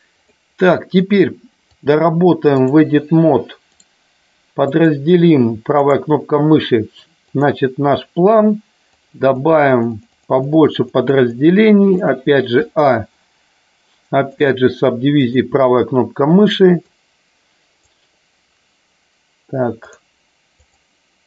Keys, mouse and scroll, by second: 0.2 click, 1.7-2.7 drag, 3.7 right click, 5.8 right click, 7.3 click, 8.8 click, 9.4 click, 9.7 click, 11.1 click, 11.9 click, 14.2 right click, 16.7 click, 20.6 click.